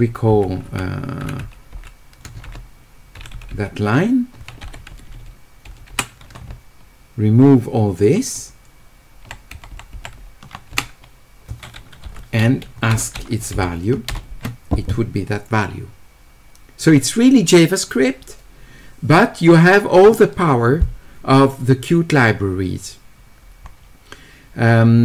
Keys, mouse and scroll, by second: 23.8-25.0 middle drag.